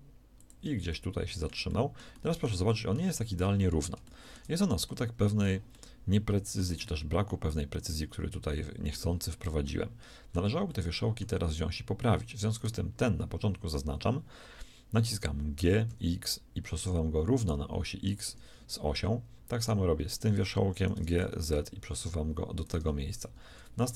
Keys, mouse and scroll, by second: 15.4 g, 19.4-20.8 drag, 20.8 g, 23.3-23.9 typing.